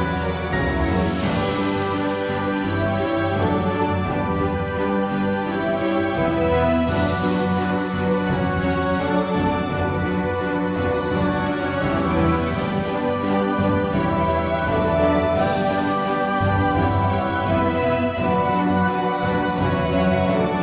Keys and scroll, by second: 0.3 g, 3.6 s, 6.6 KP_1, 13.3 a, 16.7 g.